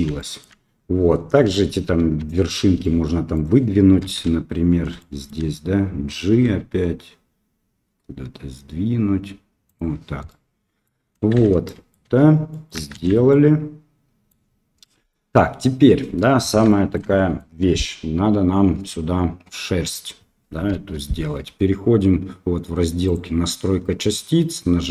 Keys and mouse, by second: 0.1 shift+middle click, 1.5 KP_1, 1.9 KP_3, 2.8 middle click, 3.3 middle click, 4.1 KP_1, 4.9 shift+middle click, 6.4 g, 10.2 middle click, 11.3 shift+z, 11.6 middle click, 12.0 Tab, 12.5 middle click, 12.9 shift+z, 13.2-14.3 middle drag, 14.8 middle drag, 16.6-16.9 shift+middle drag, 17.1 middle drag, 20.7 KP_7, 23.0 click.